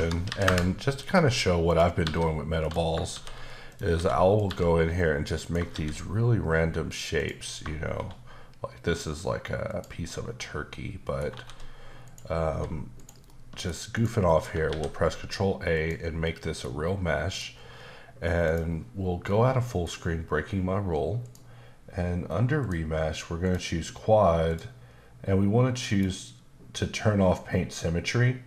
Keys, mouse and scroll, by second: 0.2 KP_2, 0.4 KP_Enter, 1.6 click, 2.0 g, 2.6 click, 3.1 shift+d, 3.7 click, 3.9 s, 4.3 click, 4.4 g, 5.4 click, 5.7 shift+d, 7.2 click, 7.8 shift+d, 9.6 click, 10.1 middle click, 11.3 shift+d, 12.0 click, 12.5 g, 12.9 click, 13.9 middle click, 14.7 ctrl+a, 15.7 click, 16.2 middle click, 18.4 click, 19.3 middle click, 21.2 click, 22.6 click, 23.4 click, 24.5 click, 25.9 click.